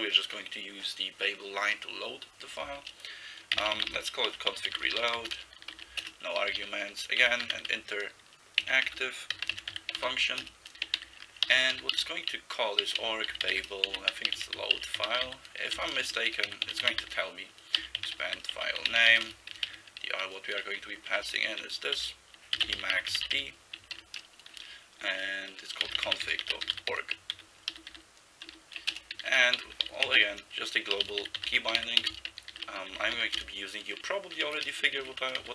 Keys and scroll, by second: 3.4-19.7 typing, 21.1-24.0 typing, 25.6-35.5 typing, 28.9 Return, 35.0 Left.